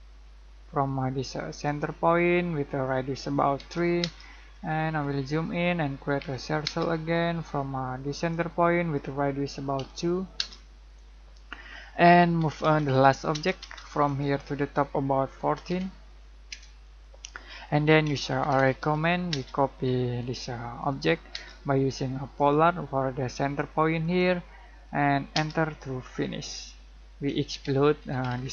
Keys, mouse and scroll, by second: 1.6 click, 3.5 3, 4.0 space, 4.5 scroll up 1, 5.5 middle click, 6.2 c, 6.6 space, 8.1 click, 9.7 2, 10.3 space, 11.2 scroll down 1, 11.7 middle click, 12.3 m, 12.6 space, 12.9 l, 13.3 space, 14.0 click, 15.3-15.6 typing, 16.5 Return, 17.8-19.3 typing, 20.2 click, 21.3 space, 22.3 click, 25.3 space, 26.0 scroll down 1, 27.0-28.5 typing.